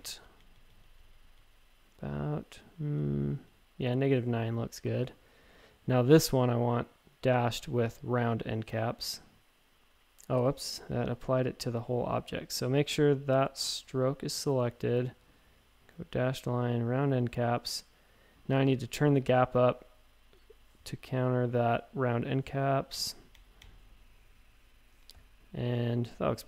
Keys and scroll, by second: 0.2 Page_Down, 0.4 Page_Down, 0.5 Page_Down, 0.7 Page_Down, 0.8 Page_Down, 3.4 Up, 10.3 super+z, 10.6 super+z, 11.6 super+z, 19.0 Up, 19.5 Up, 22.9 Up, 23.3 Up.